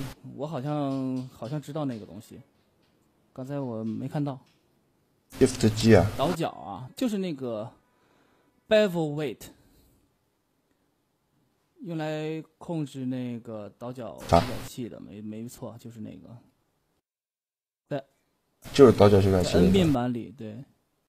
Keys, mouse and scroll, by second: 2.3-4.2 drag, 4.5 middle click, 5.2 shift+g, 18.6 Tab, 19.3-21.0 drag.